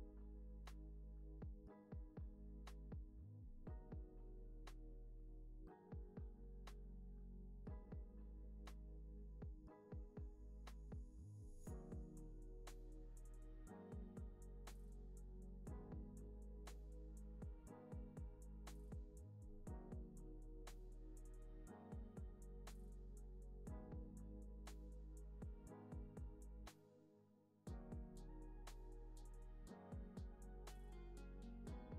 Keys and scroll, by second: 9.1 space, 14.8 u, 16.1 u, 17.4 alt+x, 20.6 =, 27.6 super+z.